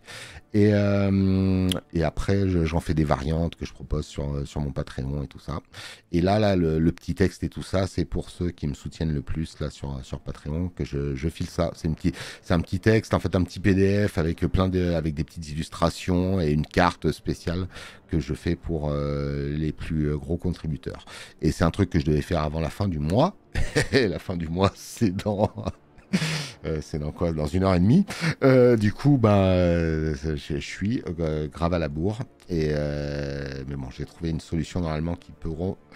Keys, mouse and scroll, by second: 7.1 space, 8.2 alt+scroll, 27.7 space, 27.9 click.